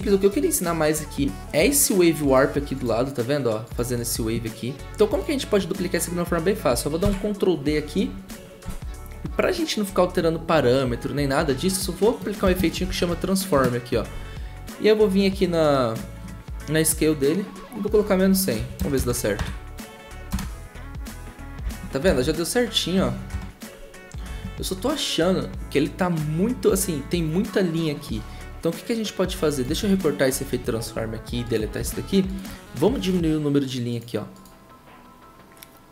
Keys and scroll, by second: 7.0 ctrl+d, 12.5-13.6 typing, 18.1-22.1 typing, 23.3 0, 29.8 ctrl+x, 31.7 Delete.